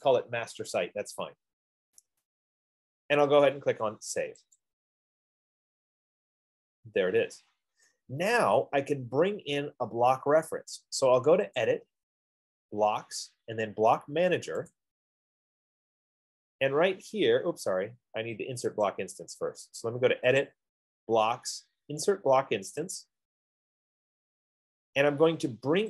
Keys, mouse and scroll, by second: 4.9-9.9 drag, 12.0-14.1 drag, 15.2 click, 19.1 click, 20.8 click, 21.7 F15, 23.4 click.